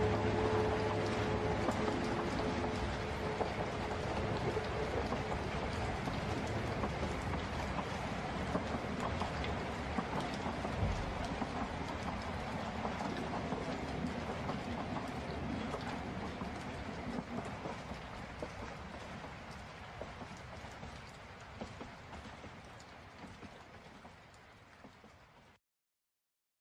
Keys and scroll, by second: 11.4 ctrl+z, 22.4 ctrl+space, 22.8 ctrl+z.